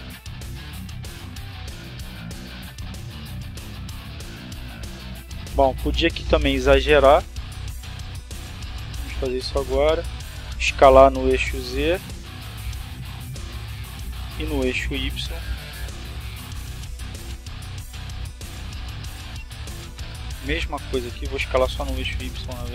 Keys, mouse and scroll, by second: 1.8 right click, 4.5 s, 5.3 z, 7.6 click, 9.0 s, 9.5 y, 10.8 click, 12.1-14.8 drag, 15.5 s, 16.0 y, 17.3 click, 18.5 right click, 19.6 s, 20.8 click, 22.0-22.7 drag.